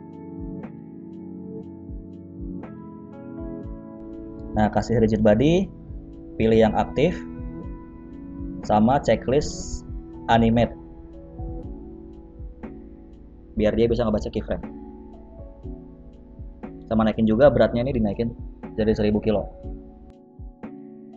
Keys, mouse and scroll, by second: 0.1 middle click, 0.6 KP_Decimal, 1.2 scroll down 2, 1.4 middle click, 2.7 click, 3.7 click, 7.2 click, 7.2 scroll down 2, 8.7-9.4 scroll down 2, 9.4 click, 10.5-11.4 scroll up 1, 11.4 click, 11.4-11.9 scroll up 2, 12.6 click, 16.7 click, 17.6 KP_0, 17.7 KP_0, 19.4 click, 19.7 space.